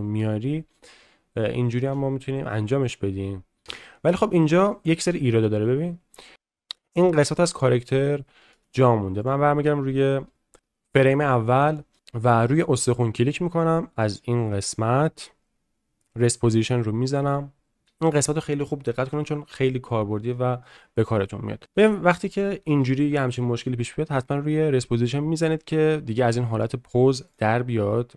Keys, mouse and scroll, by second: 3.6 space, 4.7 middle click, 11.7 shift+middle drag, 16.2 click, 20.3 shift+middle click, 21.0 middle click, 21.8-22.7 shift+middle drag, 27.3 click.